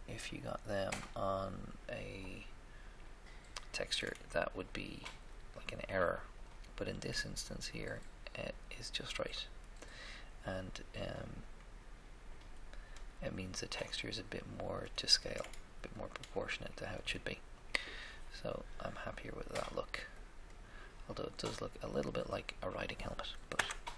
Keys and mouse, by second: 13.3 middle click, 15.0 middle click, 20.2-22.1 drag, 23.6 Tab.